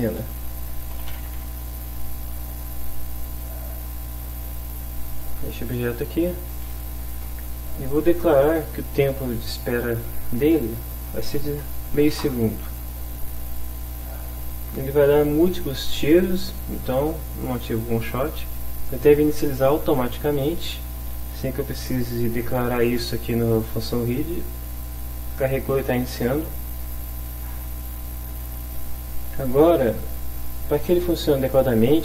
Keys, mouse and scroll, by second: 0.8-1.4 typing, 3.2 click, 4.5 click, 9.4 click, 11.1 0, 11.5 ., 11.9 5, 12.1 Return, 26.1 click, 30.6 click.